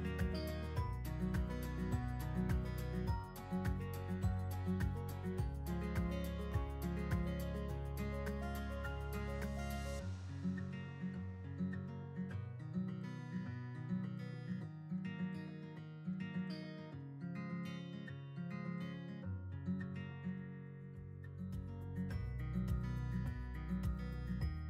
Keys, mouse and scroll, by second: 1.5 click, 1.6-4.6 drag, 4.6-21.5 drag, 22.5-24.6 drag.